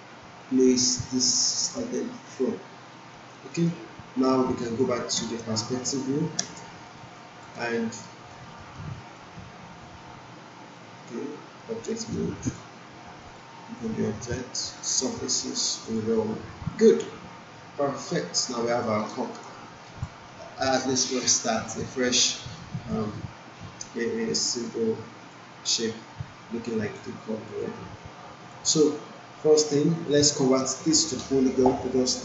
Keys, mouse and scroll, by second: 0.9 alt+middle click, 1.3-1.9 alt+right drag, 4.2 alt+middle click, 5.1 alt+space, 7.1 alt+click, 7.5 alt+right click, 8.0 alt+middle click, 8.9 alt+click, 11.0 right click, 12.1 right click, 12.4 click, 16.7-18.9 alt+drag, 19.0 alt+middle click, 19.4-20.0 alt+drag.